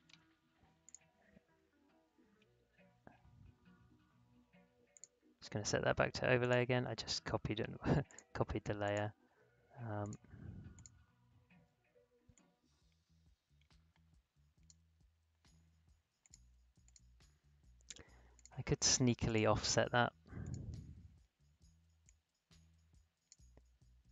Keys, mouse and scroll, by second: 1.0 click, 2.1 ctrl+c, 2.3 ctrl+v, 4.9-16.2 drag, 16.9 click, 22.3-24.1 drag.